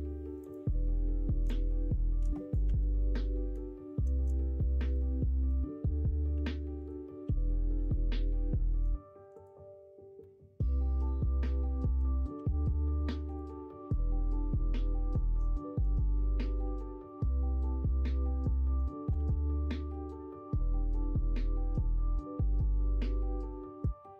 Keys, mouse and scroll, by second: 0.4 click, 1.4-2.6 drag, 2.6 ctrl+z, 2.9 middle click, 4.5 middle click, 5.2 middle click, 6.3 3, 6.8 click, 7.2 x, 8.1 middle click, 9.3 click, 9.3 typing, 10.1-11.9 middle drag, 12.3 typing, 13.9 middle click, 14.4 middle click, 15.9 middle click, 16.6 click, 17.0 middle click, 18.0 click, 19.1 ctrl+z, 19.8 g, 23.1 middle click, 23.8-24.1 middle drag.